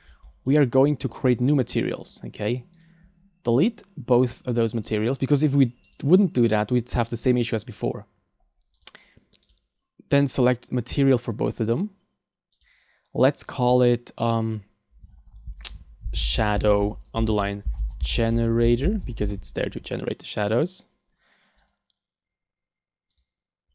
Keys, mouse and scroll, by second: 2.8 click, 3.7 right click, 4.9 right click, 5.9 right click, 7.3 click, 8.7 click, 9.5 right click, 10.3 click, 12.6 right click, 13.4 click, 20.5 right click, 21.6 click.